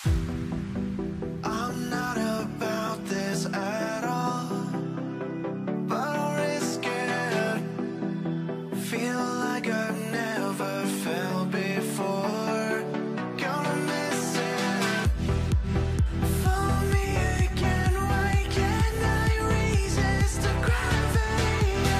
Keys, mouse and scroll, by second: 16.8 double click.